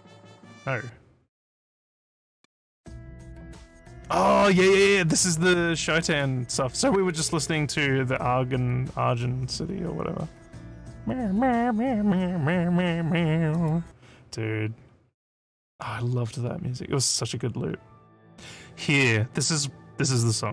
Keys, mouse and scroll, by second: 0.5 click, 13.6 click.